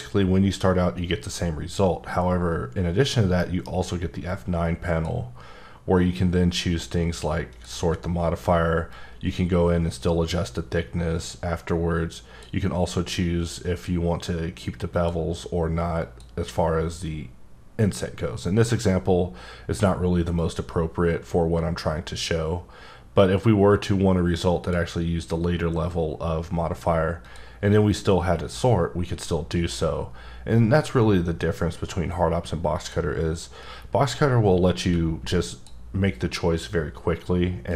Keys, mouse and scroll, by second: 3.4 F9, 4.2 click, 7.5 click, 8.9 click, 14.9 click, 16.0 click, 18.7 click, 20.4 click, 27.2 click, 32.7 click, 34.8 q, 35.5 click, 37.7 click.